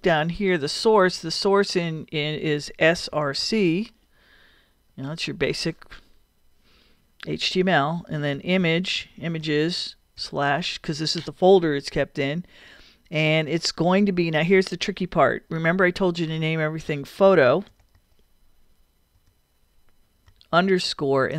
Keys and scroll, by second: 2.9 s, 3.1 r, 8.1-9.3 typing, 17.3 p, 17.9 o, 19.2-21.3 typing.